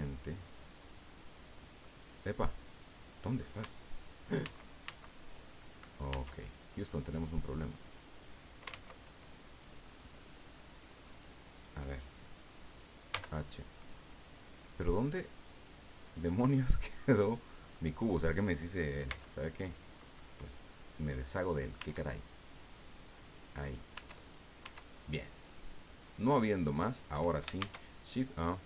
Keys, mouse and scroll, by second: 1.8-3.5 middle drag, 4.4 ctrl+z, 6.1 Tab, 7.0-8.4 drag, 8.7 ctrl+z, 9.8-11.2 drag, 11.5 right click, 13.1 h, 14.0-16.1 drag, 16.5-17.9 drag, 19.1 x, 19.6 click, 20.1-21.5 drag, 21.8 Tab, 22.5 right click, 23.2 right click, 23.9 Tab, 24.6 Tab, 25.5-27.2 drag, 27.6 shift+a.